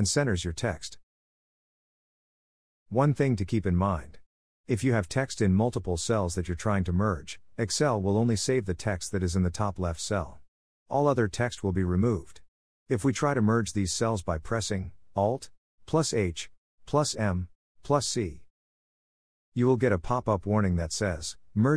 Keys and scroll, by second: 17.0 alt+h, 17.9 m, 21.0 c.